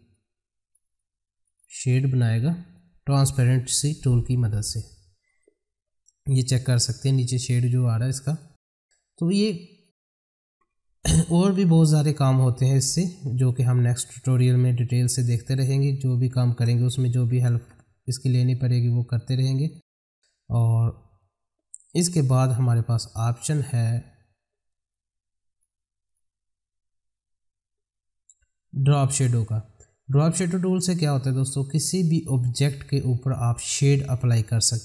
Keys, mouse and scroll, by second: 1.4 ctrl+right click, 1.9 click, 3.7 F9, 8.3 click, 8.9-9.3 scroll down 1, 9.4-12.2 drag, 12.7 F4, 13.3-15.7 drag, 16.5 space, 17.1 F4, 17.5 space, 18.4 click, 20.0 middle click, 20.8-21.2 scroll up 1, 21.2-24.0 middle drag, 24.9 click, 30.4 click.